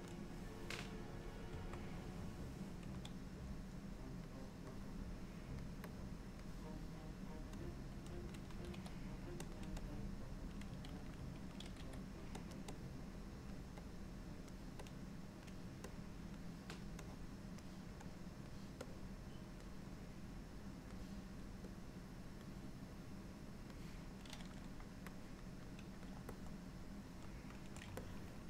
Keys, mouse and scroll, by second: 1.6 KP_3, 3.1 click, 4.8 click, 6.0 click, 7.7 click, 8.8 f, 9.9 click, 11.8 f, 12.8 click, 13.9 click, 14.9 click, 16.0 click, 17.1 click, 18.1 click, 18.9 click, 20.0 click, 21.8 click, 23.0 click, 25.2 click, 26.4 middle click, 28.1 ctrl+middle click.